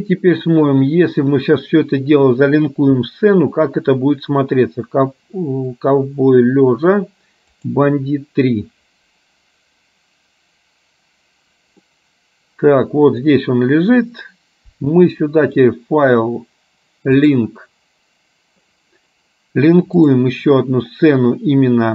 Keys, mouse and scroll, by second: 12.2-13.7 middle drag, 15.6-18.7 drag.